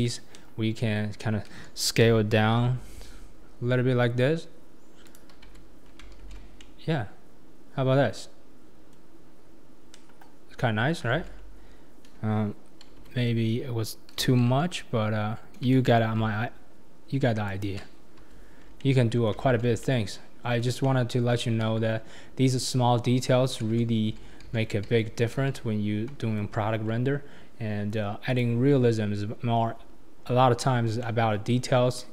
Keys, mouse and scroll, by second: 0.3 KP_3, 2.1 s, 5.5 Tab, 5.8 scroll down 3, 6.2 alt+z, 6.6-9.2 middle drag, 9.2-9.9 scroll up 2, 9.9 KP_3, 11.1 alt+z, 12.9 Tab, 14.4 s, 18.3 Tab, 18.6 scroll down 3, 18.8-19.4 middle drag, 19.4 alt+z, 19.8-21.6 middle drag, 21.6 KP_1, 23.7 ctrl+z, 24.1 ctrl+z, 24.5 ctrl+z, 24.9 ctrl+z, 25.3 ctrl+z, 26.2 Tab, 26.7-28.4 scroll down 4, 28.4-31.0 drag, 31.0-31.8 middle drag, 31.8-32.1 scroll up 3.